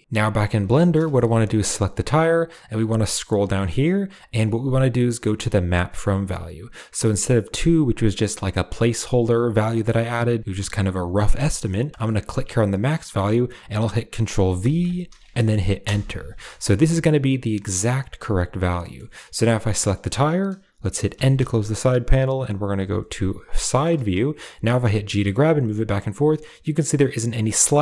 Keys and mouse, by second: 0.7 shift+middle drag, 1.1 g, 4.0 click, 12.3-15.7 drag, 16.8-18.4 drag, 19.4 click, 21.1 n, 22.6 KP_3, 23.5 shift+middle drag, 24.8 g, 27.4 shift+middle drag.